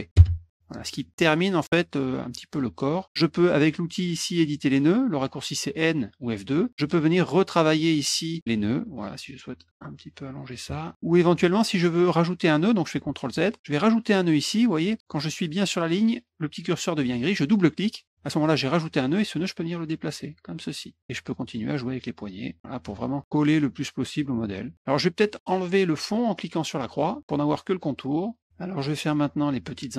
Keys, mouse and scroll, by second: 0.1 Return, 1.1 middle click, 6.1 click, 6.7 middle click, 7.1 click, 8.5-10.5 drag, 13.0 ctrl+z, 19.3-20.7 drag, 21.0 click, 22.6-24.1 drag, 24.4 middle click, 26.9 click, 28.3 click.